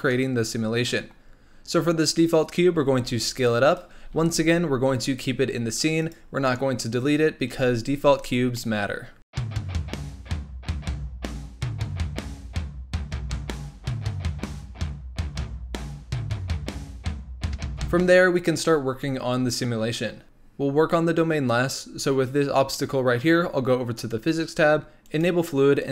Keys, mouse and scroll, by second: 0.1-2.3 middle drag, 2.3-2.8 scroll up 2, 2.8 s, 3.9 g, 6.2 scroll down 3, 6.4-7.6 middle drag, 7.6 z, 8.5-9.2 middle drag, 9.2 g, 9.5 s, 10.0 middle click, 10.7-17.5 typing, 13.2-13.6 middle drag, 13.6 scroll up 1, 13.9 middle click, 16.4 middle drag, 17.0 middle click, 17.4 middle drag, 17.7-18.7 middle drag, 18.7-20.2 scroll down 1, 23.9 click, 25.0 click, 25.8-25.9 drag.